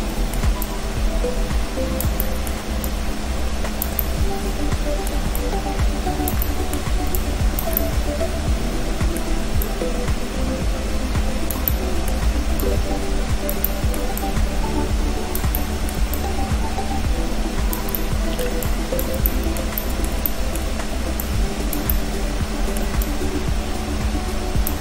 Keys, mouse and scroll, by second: 0.7 click, 2.2 middle click, 2.9 click, 4.0 middle click, 5.4 shift+click, 6.5 middle click, 7.2 shift+click, 7.8 middle click, 9.7 click, 11.7 middle click, 12.7 click, 13.7 middle click, 14.2 click, 15.6 middle click, 16.2 shift+click, 18.0 middle click, 18.7 shift+click, 19.3 middle click, 19.8 shift+middle click, 20.3 middle click, 20.8-21.3 scroll up 2, 21.3 click, 21.9 middle click, 23.1 click.